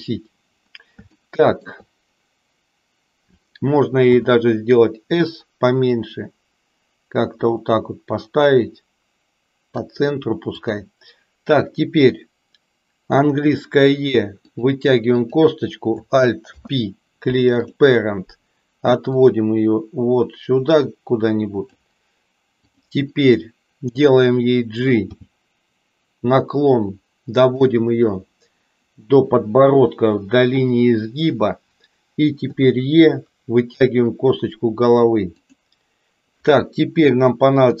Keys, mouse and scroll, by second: 1.1 shift+middle click, 4.1 s, 5.9-9.8 drag, 10.5 click, 13.1 e, 15.0 click, 16.5 alt+p, 19.1-21.8 drag, 25.1 g, 32.5 e, 37.7 e.